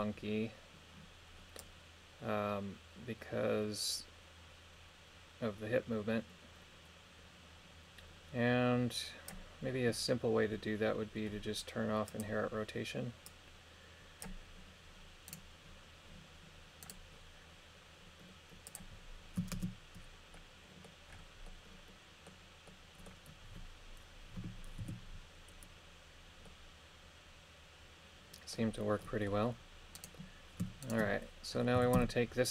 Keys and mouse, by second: 1.6-5.2 drag, 12.1 click, 13.3 click, 15.3-16.7 right drag, 16.8 right click, 18.7 click, 19.5 shift+space, 20.4 middle click, 21.5 middle click, 22.7 middle click, 24.8 KP_3, 26.5-28.6 middle drag, 29.0 middle click, 30.0 right click, 30.8 shift+right click, 31.8 a, 32.0 a.